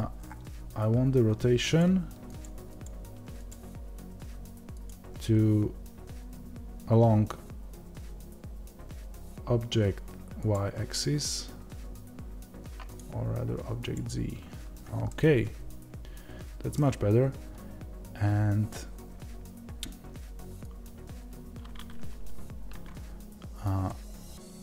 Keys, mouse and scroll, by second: 15.0-20.8 middle drag, 20.8-24.6 drag.